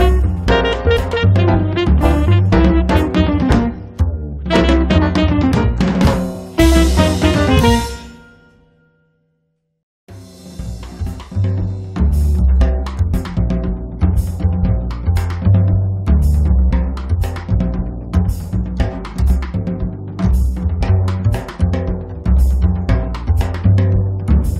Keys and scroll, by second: 0.8 p, 2.6 2, 3.0 Return, 8.9 space, 15.4-17.8 typing, 19.0 p, 20.1 2, 20.5 Return, 20.9 space, 22.4 Escape, 24.4 m.